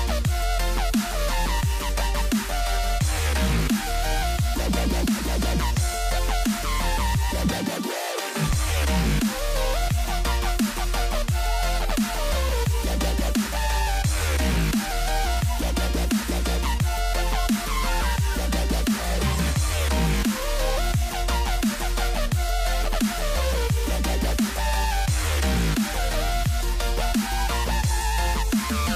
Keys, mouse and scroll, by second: 6.2 x, 9.2-12.1 middle drag, 12.1 s, 15.1-18.1 middle drag, 18.1 a, 21.0 right click, 24.0 click, 27.0 KP_1.